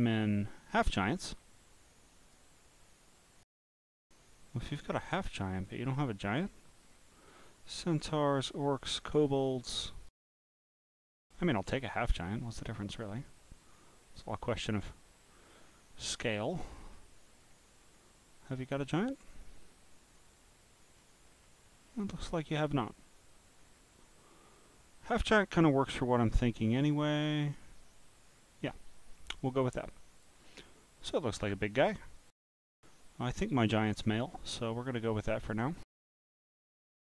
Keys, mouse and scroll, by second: 1.3 scroll down 3, 2.2 click, 4.5 scroll down 1, 6.3-6.8 scroll down 2, 6.8-7.7 scroll down 1, 7.7-8.4 scroll down 1, 8.4-8.9 scroll down 1, 9.0-10.2 scroll down 2, 10.3-11.2 scroll up 17, 11.8 scroll up 4, 12.0 scroll down 1, 12.5-13.2 scroll down 9, 14.0 scroll down 2, 14.8 scroll up 2, 15.5 scroll up 2, 16.2-16.9 scroll up 6, 17.4 scroll down 2, 17.8 scroll up 4, 18.6-19.7 scroll up 6, 19.7 scroll down 1, 20.8 scroll down 1, 20.8 scroll down 1, 21.3 scroll down 1, 21.3 scroll down 1, 21.4 scroll down 1, 21.8 scroll down 1, 21.9 scroll, 21.9 scroll down 1, 23.0 scroll down 1, 23.0 scroll down 1, 23.1 scroll up 3, 23.6 scroll up 4, 24.3-26.0 scroll up 14, 26.5 scroll up 4, 27.2-27.8 scroll up 4, 27.8-29.2 scroll, 29.7 click, 30.5-31.9 drag, 33.7 scroll down 1, 33.8 scroll down 1, 33.8 scroll down 1, 34.2 scroll down 1, 34.2 scroll, 34.3 scroll up 6, 36.8 click.